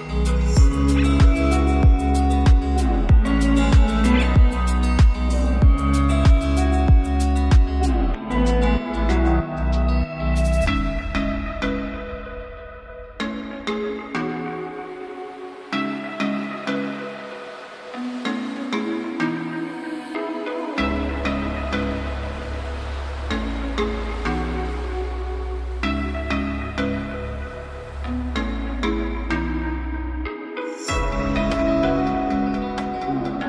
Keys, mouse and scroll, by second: 10.4 click, 15.9 click, 16.0 click, 20.1 click, 20.3 click, 23.0 click, 23.3-32.4 drag.